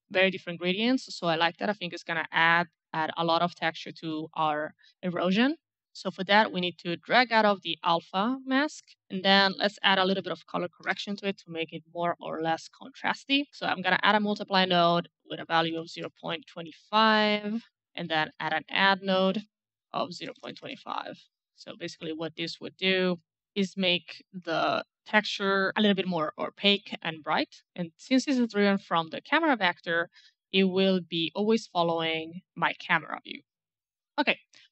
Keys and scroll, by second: 9.3-11.5 typing, 15.4 KP_Decimal, 15.6 KP_2, 15.7 KP_5, 15.9 Return, 17.8-18.8 typing, 20.1 KP_Decimal, 20.3 KP_2, 20.4 KP_5, 20.6 Return.